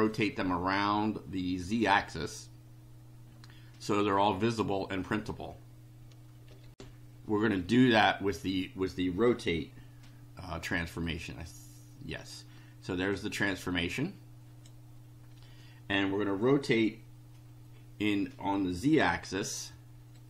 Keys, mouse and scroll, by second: 6.7 ctrl+r, 11.0 click, 13.1-14.8 drag, 20.1 click.